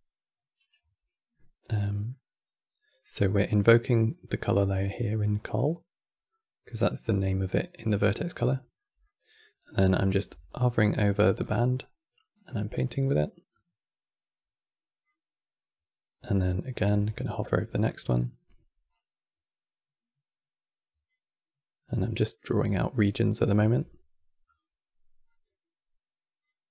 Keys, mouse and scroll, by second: 0.0-0.9 scroll up 3, 1.1-3.6 middle drag, 3.6 click, 6.7 click, 8.5-10.0 middle drag, 10.0 e, 12.5-15.4 drag, 16.6 e, 19.1-21.6 drag, 23.3 e, 25.4-26.7 drag.